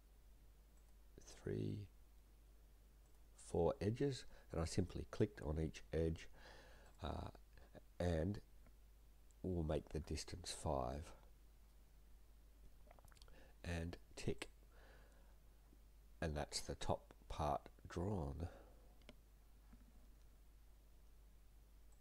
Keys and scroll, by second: 9.9 5, 11.0 Return.